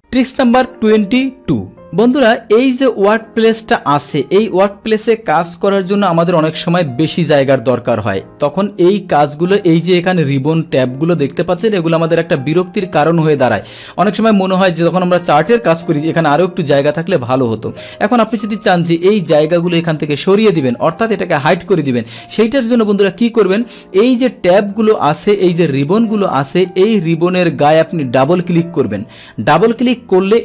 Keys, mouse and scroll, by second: 24.4 click, 24.9 click, 25.4 click, 26.0 click, 26.6 click, 28.1 click, 28.3 click.